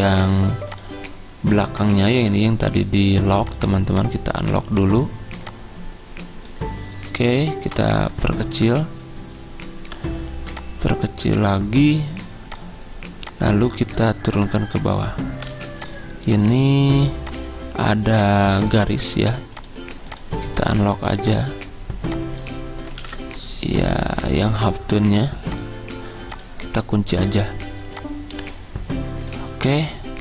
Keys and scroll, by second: 15.6 ctrl+z, 23.2 ctrl+z.